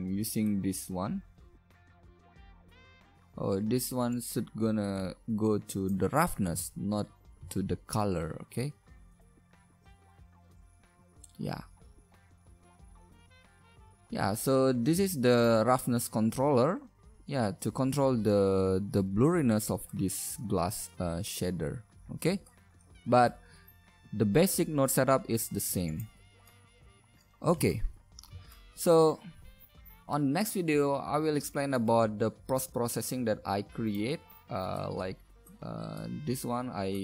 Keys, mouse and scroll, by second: 3.1 shift+z, 8.9 shift+z, 18.7-21.1 middle drag, 21.2-24.3 middle drag, 24.5-25.4 drag, 26.9 a, 27.1 ctrl+alt+b, 27.1 shift+z, 35.0 click.